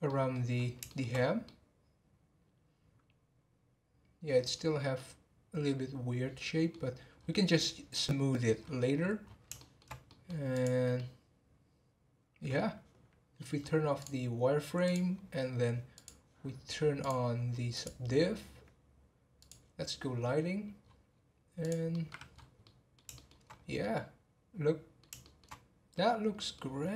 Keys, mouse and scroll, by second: 0.1-0.5 middle drag, 0.5-1.4 scroll up 2, 0.8 shift+middle drag, 1.4-4.5 middle drag, 4.9-6.7 middle drag, 6.7-7.1 scroll down 1, 7.1 scroll up 1, 8.0-8.6 scroll down 2, 8.6 scroll up 4, 9.1 scroll down 2, 9.6-10.5 shift+middle drag, 10.5 click, 10.9-14.0 middle drag, 14.0-16.0 drag, 17.0 click, 20.8 scroll down 4, 21.6 click, 21.9-22.3 middle drag, 22.3 scroll up 4, 22.6 middle click, 23.5 scroll up 2, 23.8-25.5 middle drag, 25.5 scroll down 2, 25.9 middle click, 26.8 scroll up 2.